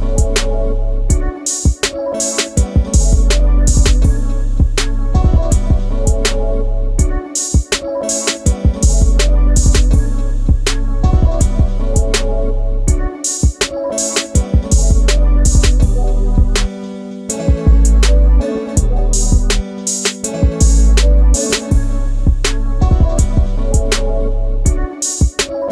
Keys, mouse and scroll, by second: 2.7 Delete, 3.0 Escape, 5.6 m, 9.0 click, 9.4 Escape, 9.6 space, 13.6 m, 15.6 middle click, 15.8 shift+space, 16.8 Delete, 18.2 m, 20.4 shift+middle click, 20.8 space, 22.2 Delete.